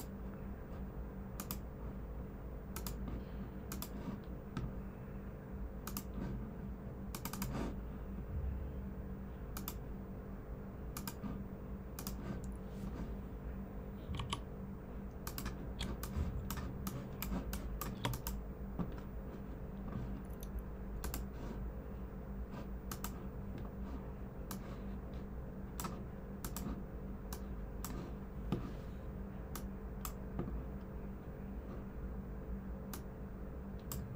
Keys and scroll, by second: 14.1 v, 15.7-16.8 typing.